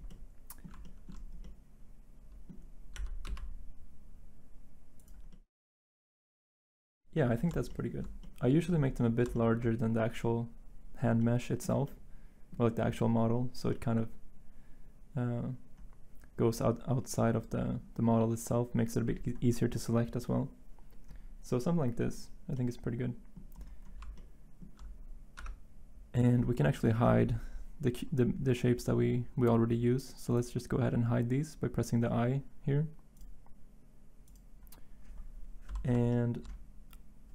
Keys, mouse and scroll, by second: 2.9 s, 3.2 x, 25.3 Tab.